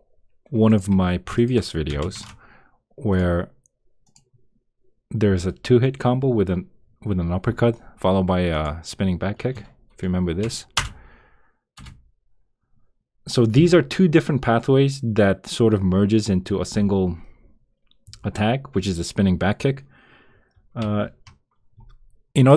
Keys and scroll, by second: 11.7 Return.